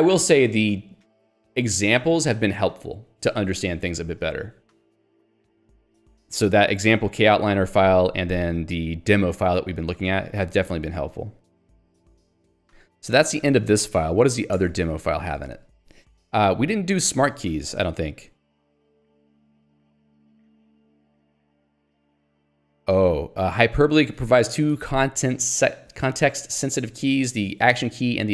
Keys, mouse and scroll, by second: 4.9 j, 5.1 Escape, 5.4 j, 6.5 k, 10.2 j, 11.6 ctrl+d, 13.7 ctrl+alt+j, 13.8 shift+d, 14.6 Return, 15.4 Escape, 17.6 ctrl+d, 19.7 ctrl+u, 20.3 ctrl+d, 21.3 j, 23.4 k.